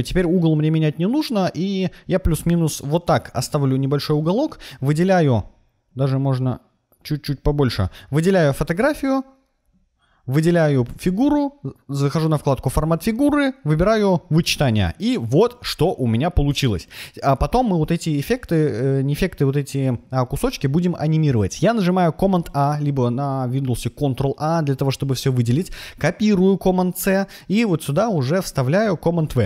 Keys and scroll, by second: 22.2 super+a, 25.3 super+c, 28.6 super+v.